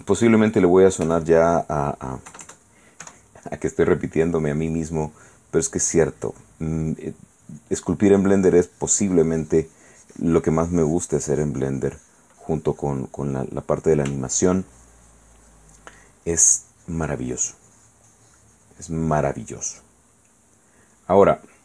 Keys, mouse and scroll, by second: 1.2 f, 1.7 click, 2.5 KP_Add, 4.4-5.8 drag, 6.2-8.0 drag, 8.6-13.8 drag, 13.9 middle click, 13.9 click, 14.3 shift+right click, 14.4 shift+middle click, 14.8-15.9 shift+drag, 15.9 middle click, 16.5-20.0 drag, 20.0-21.1 middle drag.